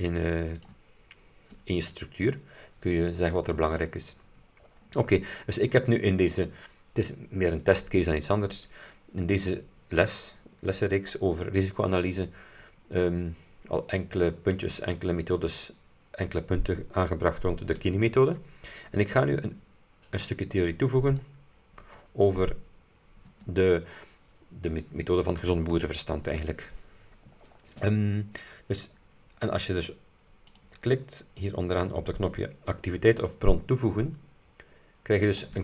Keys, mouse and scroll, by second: 0.7 click, 4.7-5.7 scroll up 6, 13.1-13.4 scroll down 2, 21.2 click, 30.5 click, 35.4 click.